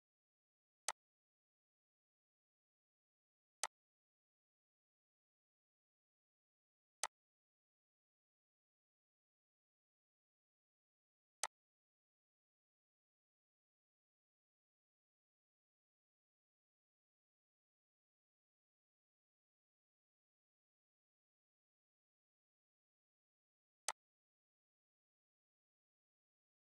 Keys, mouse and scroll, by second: 0.9 click, 3.6-11.4 drag, 11.4-21.4 alt+drag, 23.8 alt+Num_Lock, 23.9-26.7 alt+drag.